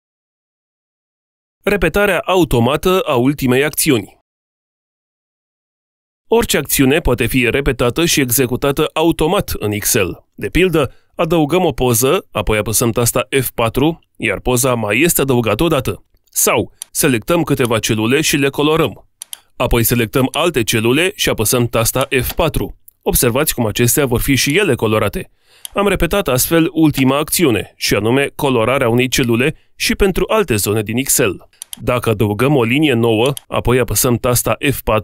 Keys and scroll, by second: 13.0 F4, 21.7 F4, 34.0 F4.